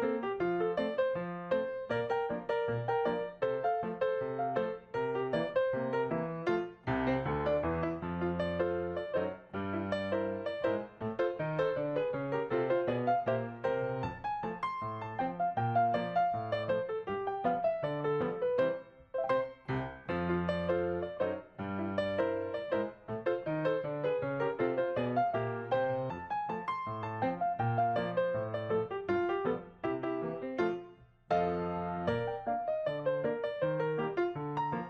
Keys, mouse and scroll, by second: 0.0-0.4 Right, 2.4 Right, 2.6-3.0 Right, 3.3-3.8 Down, 4.8 ctrl+s, 8.0-8.4 Left, 11.4 Down, 12.5 Right, 13.6-14.0 Right, 14.6 Right, 14.8 double click, 16.0-16.4 click, 16.0 click, 18.6 Down, 18.8 Down, 27.7 Right, 27.8 Right, 29.0 Right, 30.9 right click, 32.3 double click, 34.6 double click.